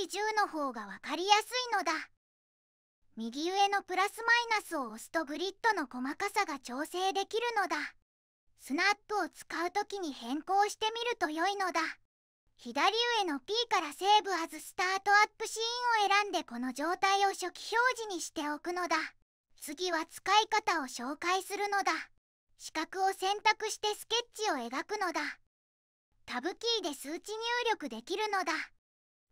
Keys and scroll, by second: 0.3 1, 0.5 0, 0.8 Return, 26.1 Tab, 27.8 1, 28.1 0, 28.4 Tab, 29.0 1, 29.2 5.